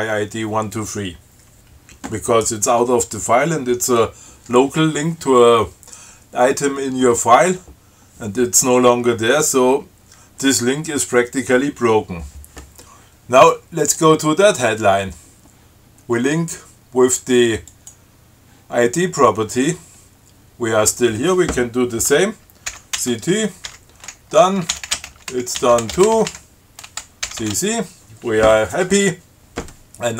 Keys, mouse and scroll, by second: 14.1 click, 16.3 scroll up 1, 17.9 click, 19.4 scroll down 1, 20.0 scroll up 1, 22.9 ctrl+c, 23.2 ctrl+t, 23.9-26.9 typing, 27.5 ctrl+c.